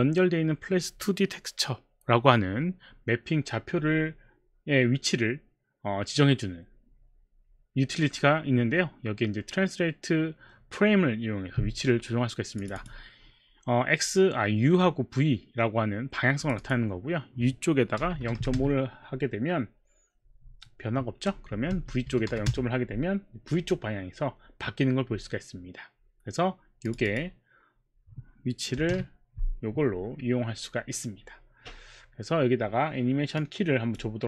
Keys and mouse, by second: 12.6 click, 12.8 click, 16.4 click, 16.6 click, 18.1 KP_0, 18.2 KP_Decimal, 18.4 KP_5, 21.6 KP_0, 21.7 Tab, 22.1 KP_Decimal, 22.3 KP_5, 23.0 Return, 23.0 KP_5, 26.8 click, 27.0 click, 28.8 KP_0, 28.9 Return, 33.4 click.